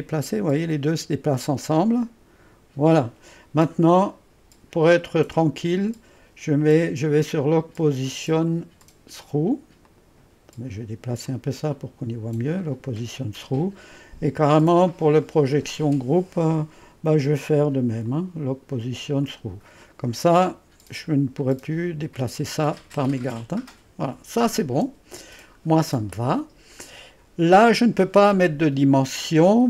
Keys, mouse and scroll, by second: 5.0 click, 5.4 click, 7.2 click, 8.4 click, 8.9 click, 9.9 click, 11.3-13.5 drag, 15.2 click, 17.6 click, 18.1 click, 19.3 click, 19.9 click, 21.4 click, 22.3 click, 23.4 click, 24.1 click, 25.2-26.8 scroll up 2.